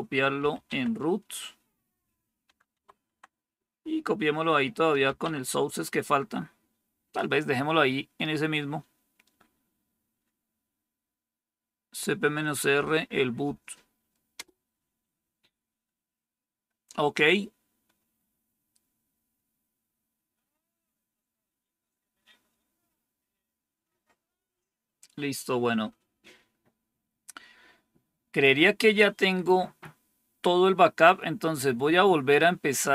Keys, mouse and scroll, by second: 0.0-0.6 typing, 4.6-6.3 typing, 14.3 Return.